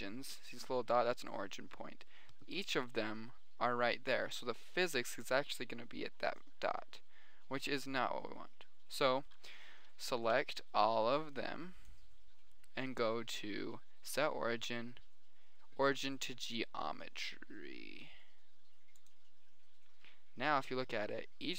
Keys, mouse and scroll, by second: 2.5-3.1 middle drag, 6.1 middle click, 7.9-9.1 middle drag, 10.8 b, 10.9 middle click, 14.5-15.5 drag, 15.7 click, 16.3-18.1 middle drag.